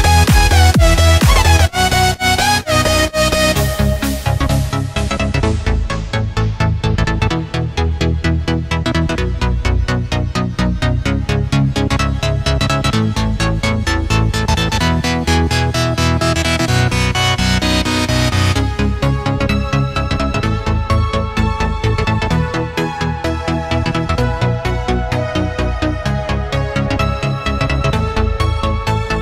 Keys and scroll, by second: 1.0 space, 1.5 super+space, 1.5 super+space, 2.9 space, 3.4 alt+super+space, 3.6 alt+super+space, 3.7 alt+super+space, 4.5-5.2 alt+super+space, 6.4 alt+shift+super+d, 9.3-11.0 typing, 19.4-21.2 typing, 26.0 space, 26.5 alt+super+space, 26.6 alt+super+space, 26.7 alt+super+space, 26.8-29.0 alt+super+space, 28.9 alt+super+space.